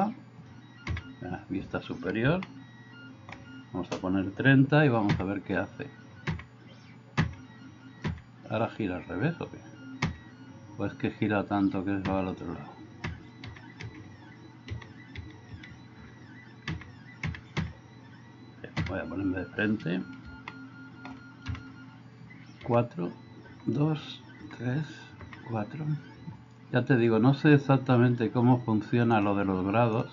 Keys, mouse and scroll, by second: 0.9 KP_7, 2.5-3.3 shift+middle drag, 5.1 KP_4, 6.2 KP_4, 7.2 KP_4, 8.1 KP_4, 10.0 KP_4, 12.1 KP_4, 13.1-15.5 typing, 16.1 Escape, 16.7 KP_4, 17.2 KP_4, 17.6 KP_4, 18.9 KP_1, 20.4-21.0 middle drag, 21.6 KP_1, 22.7 KP_4, 23.5 KP_4, 24.4 KP_4, 25.2 KP_4, 26.2 Escape.